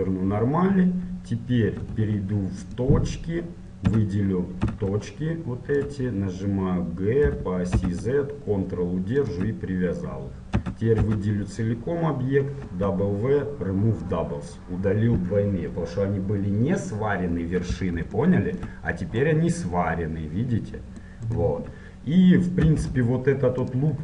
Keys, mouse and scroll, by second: 0.7-2.9 middle drag, 2.9 ctrl+Tab, 3.5-6.0 middle drag, 4.0 a, 4.7 z, 6.0-7.4 drag, 7.4 g, 10.7 a, 11.2 a, 14.3 a, 14.3 w, 17.4-19.3 middle drag, 19.3-21.2 right drag, 23.8 ctrl+Tab.